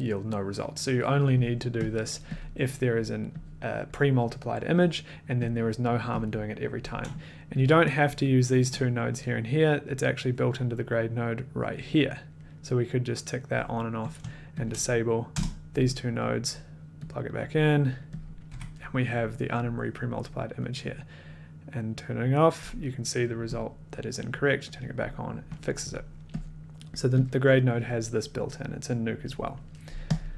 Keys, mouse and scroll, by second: 2.1 click, 2.3 click, 3.9 click, 5.8 click, 6.2 click, 7.6 click, 8.2 shift+click, 9.8 click, 10.0 click, 10.4 click, 11.8 click, 14.1 click, 14.6 shift+click, 15.3 BackSpace, 16.5 click, 17.0 click, 17.8 click, 18.4 click, 18.5 1, 20.9 click, 24.4 click, 26.6 click, 27.4 click, 30.1 click.